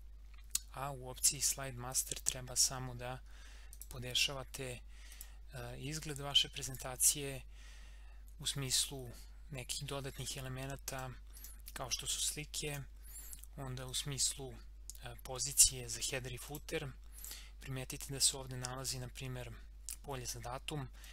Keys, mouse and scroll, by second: 1.9 click, 2.9 scroll up 1, 3.7 click, 10.9 click, 16.4 click, 21.0-21.1 drag.